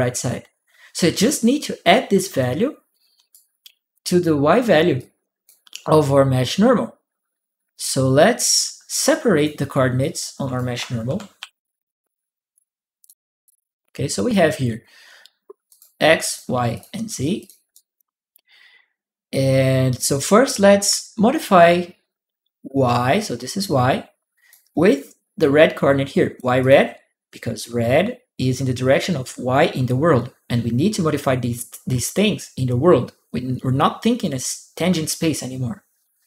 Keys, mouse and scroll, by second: 2.2 click, 3.7 click, 4.7 click, 7.9-9.2 drag, 9.8 click, 10.9 ctrl+c, 11.2 ctrl+v, 12.3 ctrl+click, 13.3 click, 15.5 click, 16.0 click, 16.5 click, 17.2 click, 17.5 right click, 22.7-24.3 drag, 25.2 click, 26.4 click.